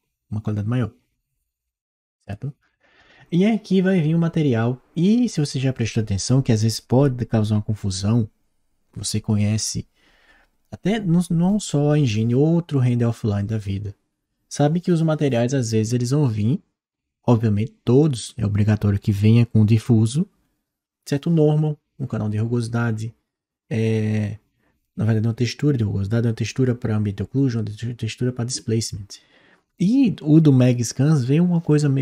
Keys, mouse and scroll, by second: 2.1 click.